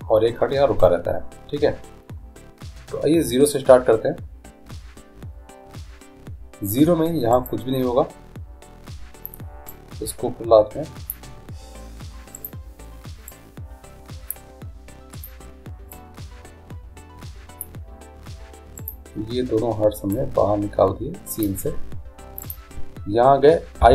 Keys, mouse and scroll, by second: 7.5-9.4 right drag, 9.9-11.7 drag, 12.6-14.3 right drag, 13.5-15.2 drag, 16.1-17.9 drag, 16.1-17.2 right drag, 19.0-20.8 right drag, 20.3-22.1 drag, 22.6-23.9 right drag.